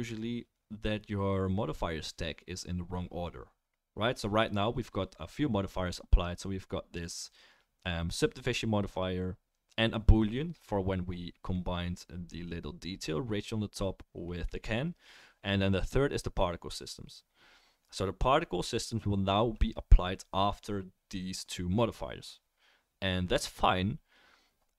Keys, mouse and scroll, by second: 10.4-24.7 middle drag.